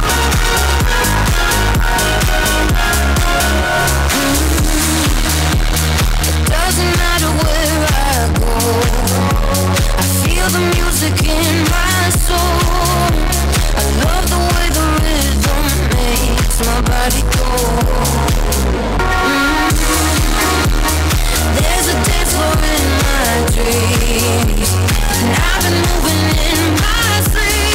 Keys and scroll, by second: 18.0 Page_Down.